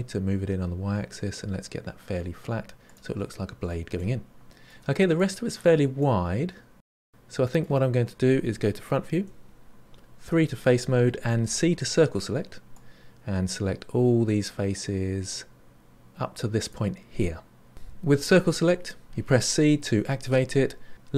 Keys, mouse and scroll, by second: 3.9 middle click, 4.7 scroll down 5, 4.9-8.5 middle drag, 9.1 KP_1, 10.2 3, 11.4 c.